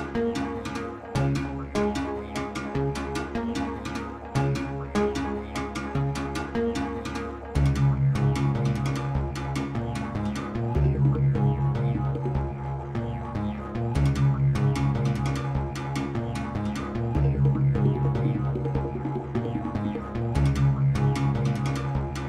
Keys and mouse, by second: 0.6 k, 0.9 x, 1.7 Page_Up, 2.7 drag, 3.5 shift+s, 4.1 ctrl+s, 4.3 space, 6.4 Delete, 6.4 Page_Down, 6.4 shift+Insert, 8.9-10.1 drag, 11.0 g, 14.0 click, 15.3-17.8 drag, 17.3 ctrl+s, 17.9 space.